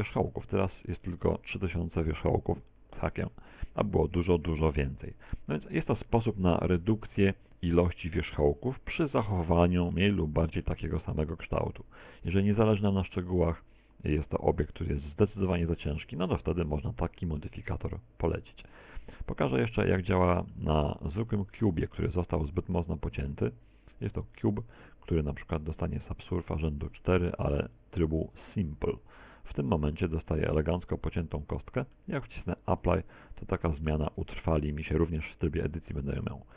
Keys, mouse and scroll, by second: 3.3 z, 5.2 middle click, 7.5 shift+middle click, 17.5 middle click, 20.6 middle click, 21.9-22.5 scroll down 5, 23.2 middle click, 23.5 middle click, 27.2 x, 28.0 middle click, 28.1 middle click, 28.3 shift+a, 31.5 middle click, 32.4 middle click, 33.9 ctrl+4, 35.4 click.